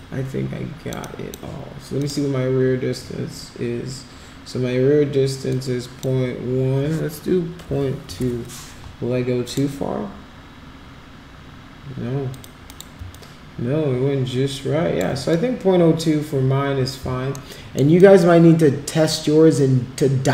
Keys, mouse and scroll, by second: 1.0 alt+click, 2.0 click, 5.5 click, 8.0 2, 8.2 Return, 9.4 click, 12.3 click, 12.6 click, 13.1-14.9 alt+drag, 17.3 alt+middle click, 17.9-20.3 alt+drag.